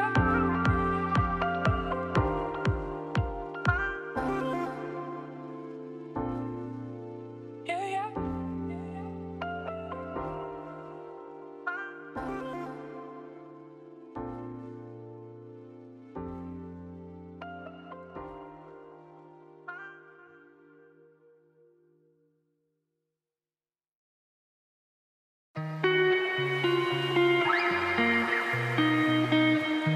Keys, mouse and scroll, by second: 0.5 click, 1.3 Tab, 1.6 Tab, 1.9 ctrl+z, 2.0 ctrl+z, 2.1 ctrl+z, 2.3 ctrl+z, 2.5 Tab, 2.6 click, 2.8 Tab, 2.9 a, 3.0 s, 4.5 Tab, 4.7 click, 4.8 Tab, 5.3 g, 6.4 click, 6.7 g, 7.7 middle click, 8.0 Tab, 8.3 click, 8.8 5, 10.1 middle click, 10.3 g, 11.9-13.9 shift+middle drag, 13.9 click, 15.6 shift+middle click, 15.7 scroll up 1, 15.8 middle click, 16.3 click, 17.3 shift+middle click, 17.5 scroll down 2, 17.7 click, 18.7 click, 19.4 ctrl+v, 20.9 click, 21.7 shift+middle click, 22.7-25.9 shift+middle drag, 25.9 scroll down 3, 26.2 middle click, 26.7-27.3 scroll down 1, 27.3-28.9 drag, 28.9 shift+middle click, 29.7-29.9 drag.